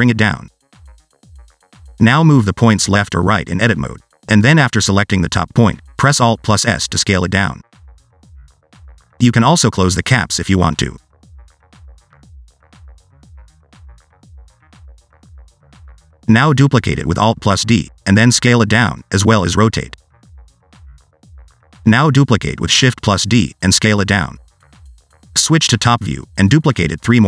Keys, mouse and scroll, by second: 0.2 click, 1.2 click, 1.7 shift+middle click, 2.0 Tab, 2.2 click, 3.1 click, 3.6 click, 4.0 click, 4.5 click, 4.7 click, 5.9 click, 6.1 alt+s, 7.2 shift+click, 8.1 click, 8.5 alt+s, 10.1 middle click, 10.4-10.8 scroll up 2, 10.6 shift+middle click, 10.8 middle click, 11.9 click, 12.1 click, 13.0-13.4 scroll down 3, 13.1 shift+middle click, 13.4 shift+middle click, 14.8 alt+d, 15.6 s, 16.0 r, 18.6 s, 20.7 click, 20.8 s, 21.6 click, 21.7 shift+d, 23.3 s, 24.9-25.3 scroll up 2, 25.3 scroll down 1, 25.4 middle click, 26.0 r, 27.0 shift+middle click, 27.2 scroll up 3.